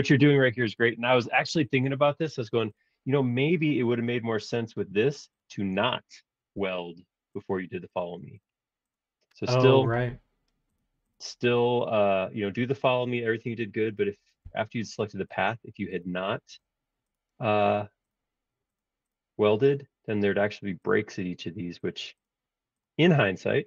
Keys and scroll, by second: 14.4 super+z, 23.3 super+z.